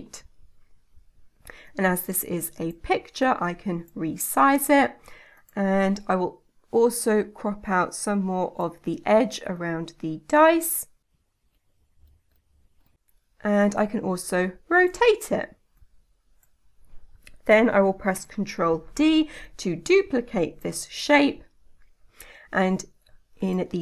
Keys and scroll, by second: 18.6 ctrl+d.